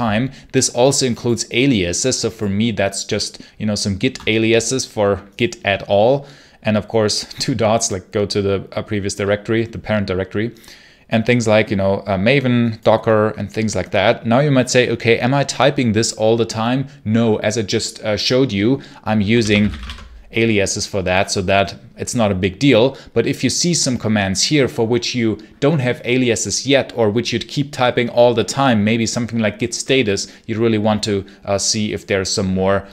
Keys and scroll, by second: 19.2-20.1 typing.